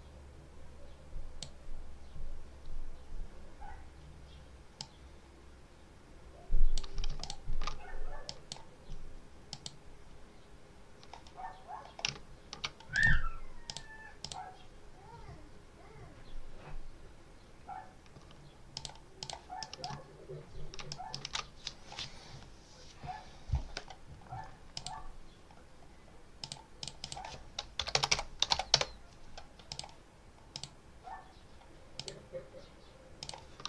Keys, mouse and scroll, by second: 4.6-6.8 drag, 7.1 ctrl+alt+click, 8.2 click, 9.4 click, 12.2 ctrl+scroll down 2, 12.8 ctrl+click, 13.6 click, 14.1 click, 18.6 click, 19.1 click, 19.5 ctrl+middle click, 19.9 ctrl+scroll up 2, 20.8 ctrl+click, 21.1 ctrl+s, 24.6 click, 25.6 scroll up 1, 26.3 click, 26.7 click, 27.4-28.8 typing, 29.6 click, 30.4 click, 31.8 click, 33.1 click.